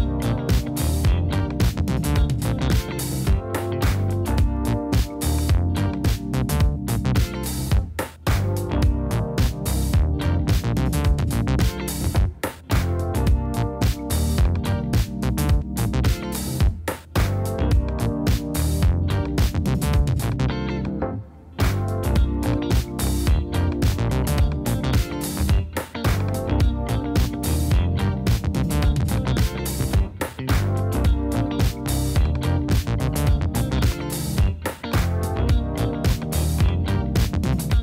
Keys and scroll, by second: 6.5 space, 10.7 space, 16.6 super+z, 29.6 BackSpace.